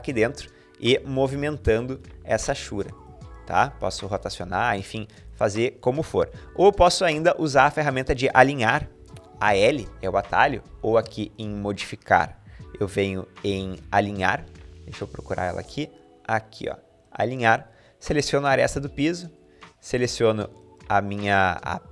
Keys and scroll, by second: 0.6-1.7 typing, 4.8 typing, 7.5 Escape, 8.8-9.1 typing, 9.9 Escape.